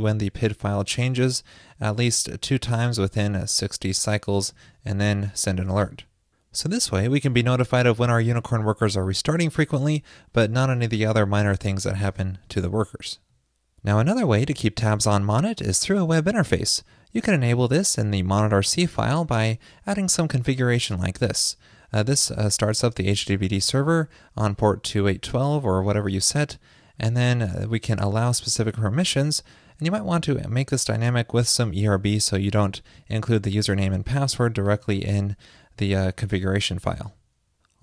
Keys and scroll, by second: 6.0 super+s, 19.7 super+v, 37.1 super+s.